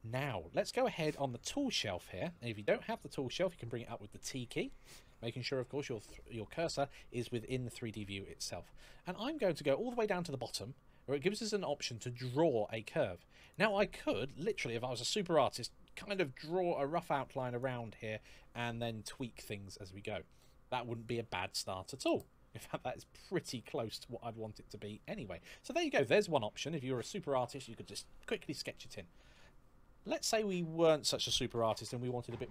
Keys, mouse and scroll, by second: 13.1 click.